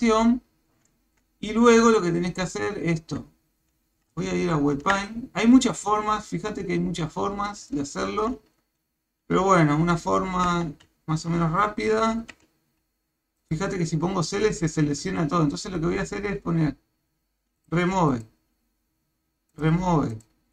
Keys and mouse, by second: 2.5 click, 4.1 ctrl+Tab, 7.7 shift+middle click, 10.5 Tab, 12.3 a, 13.4 click, 15.0 a, 18.1 click, 20.1 click.